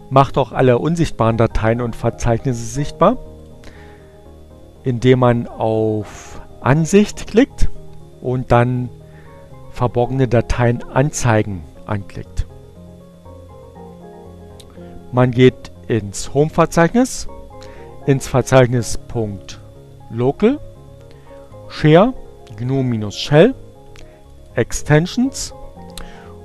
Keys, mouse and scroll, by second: 5.6 click, 12.4 click, 17.8-20.2 drag, 20.7-22.1 drag, 22.8 click, 24.1 click.